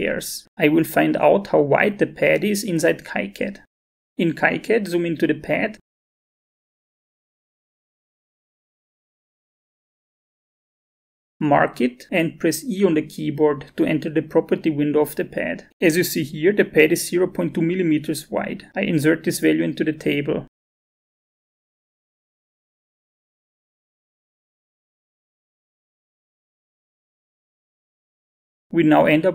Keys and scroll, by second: 3.7 alt+Tab, 13.4 e, 21.3 alt+Tab, 22.4-23.2 typing, 24.6 0, 26.6 2, 27.6 Return.